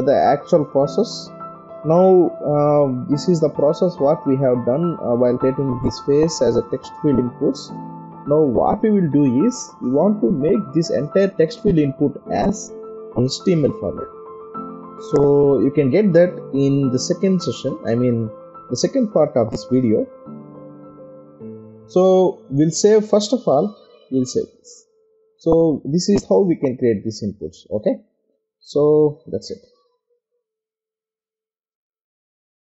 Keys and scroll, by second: 5.1 ctrl+0, 6.0 ctrl+=, 7.5 ctrl+0.